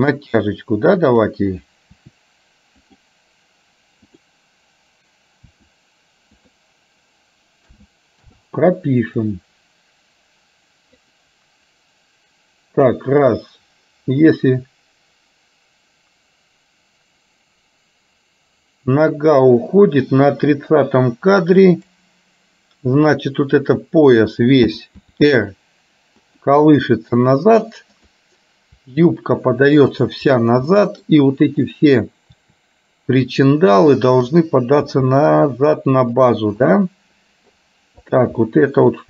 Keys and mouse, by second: 1.2 click, 2.1 r, 4.2 click, 5.6 r, 8.0 a, 8.5 i, 9.3-11.2 drag, 14.5-22.2 drag, 23.1 click, 25.0 r, 28.2 click, 29.0 r, 30.8 middle click, 31.7 click, 32.5 r, 34.2 click, 35.1 r, 36.7 middle click, 38.1 click, 38.6 middle click.